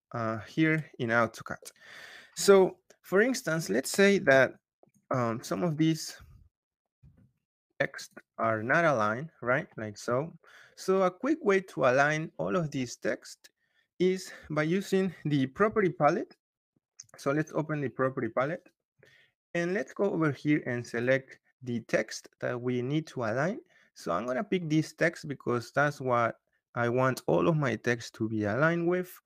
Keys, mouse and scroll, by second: 0.9 scroll, 3.4 click, 4.0 m, 4.4 click, 4.7 click, 5.4 click, 6.8 m, 7.2 click, 7.9 click, 9.0 scroll, 9.5-11.3 scroll, 11.9-12.5 scroll, 15.2-16.0 typing, 17.8 Return, 20.9 click.